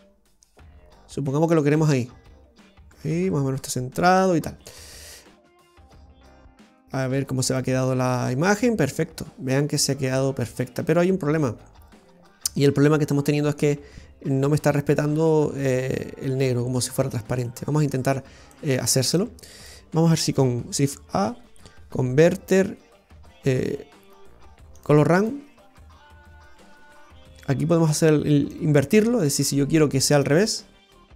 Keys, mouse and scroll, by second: 5.6 click, 6.9 scroll down 1, 7.6 middle click, 7.6-7.9 scroll up 4, 16.8-17.6 scroll down 6, 17.4 middle click, 18.6 middle click, 19.3 click, 20.5 shift+a, 28.6 click, 30.4 click.